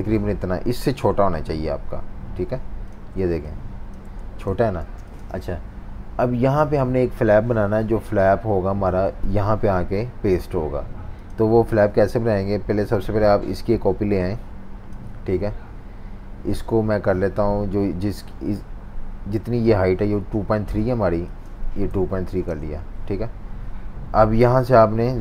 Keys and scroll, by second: 4.2 super+z, 4.8 typing, 21.6-23.7 typing.